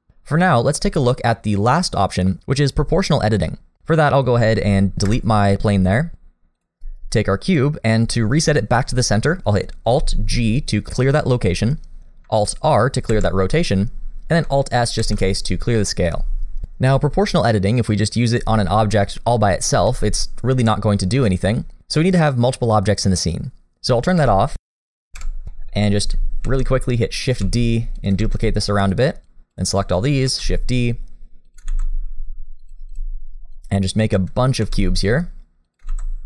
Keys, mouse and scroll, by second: 5.0 Delete, 6.6 click, 10.8 alt+g, 13.1 alt+r, 15.0 alt+s, 16.6 click, 17.8 click, 19.8 g, 24.1 click, 25.2 KP_7, 25.5 shift+middle click, 26.5 shift+d, 27.4 shift+d, 28.2 shift+d, 29.3 click, 30.3 shift+d, 31.7 shift+d, 32.9 click, 33.1-33.5 scroll down 1, 33.5 click, 34.6 shift+d, 36.0 shift+d.